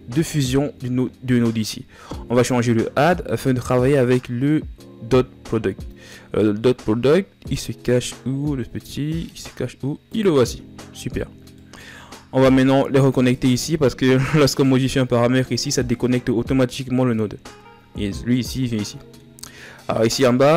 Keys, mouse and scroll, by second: 10.8-11.5 scroll down 1, 11.5-14.1 middle drag.